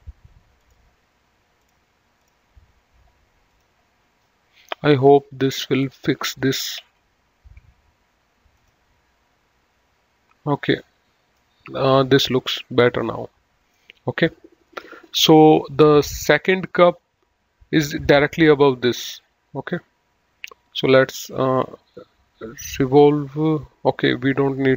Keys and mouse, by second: 0.6 ctrl+click, 3.5 click, 6.0 ctrl+s, 6.8 ctrl+w, 8.6 click, 10.8 middle click, 12.3 middle click, 21.4 click.